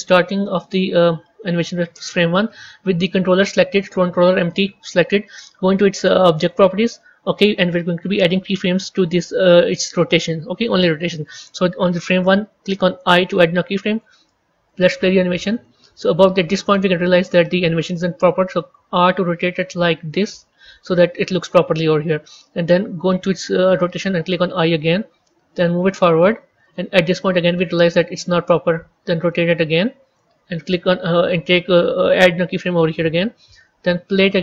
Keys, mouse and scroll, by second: 3.0 click, 14.6-18.6 drag, 18.6 r, 24.4 i, 25.8-28.6 drag, 28.6 r, 32.7 i, 34.2-34.4 drag.